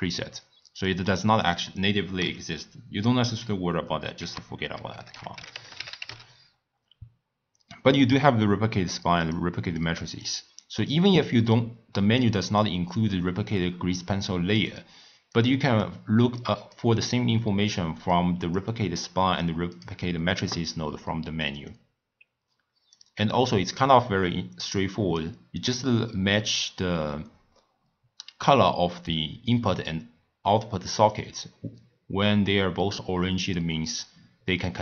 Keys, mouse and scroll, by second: 1.4 click, 2.6 x, 4.2 ctrl+a, 9.7-10.8 drag, 12.2 click, 13.5 click, 15.3 click, 16.3 click, 18.1 click, 18.9 click, 19.3 click, 19.7 click, 21.6 click, 24.2 click, 25.7-28.8 drag, 34.0 click.